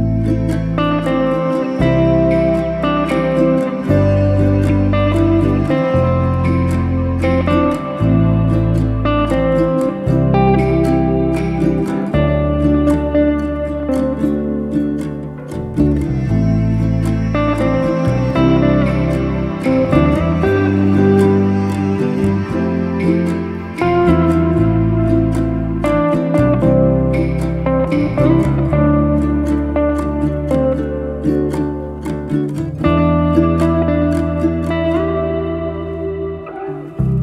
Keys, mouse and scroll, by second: 0.9 g, 4.0 drag, 4.7-5.9 middle drag, 5.9 KP_1, 6.4 drag, 7.6-9.1 middle drag, 9.7 ctrl+click, 10.4 click, 10.7-11.3 middle drag, 11.3 z, 12.4 shift+z, 12.6 middle click, 12.9 shift+z, 13.5-15.8 middle drag, 15.8 drag, 16.6 alt+z, 16.8 drag, 17.9 drag, 18.4 middle click, 19.3 KP_1, 20.0 g, 22.3-22.8 scroll down 8, 22.8 middle click, 23.3 alt+z, 23.6-24.4 scroll up 1, 24.4 Tab, 24.7 click, 24.9-25.6 middle drag, 25.6-26.2 scroll up 6, 26.2 click, 26.4-27.6 right drag, 27.6 drag, 28.2 click, 28.8 click, 29.2-29.6 scroll down 4, 29.6-30.7 middle drag, 30.7 drag, 31.3 s, 32.8 scroll down 1, 33.0 click, 33.2 middle click, 33.8 click, 34.6 s, 35.5-35.8 scroll up 5, 35.8 Tab, 36.5-37.2 middle drag.